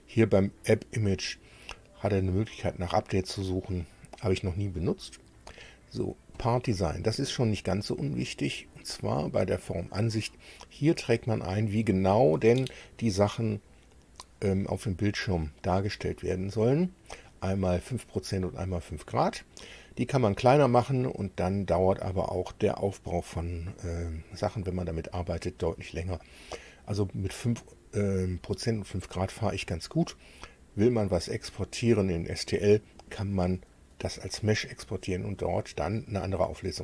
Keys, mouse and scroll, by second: 6.3 click, 9.6 click.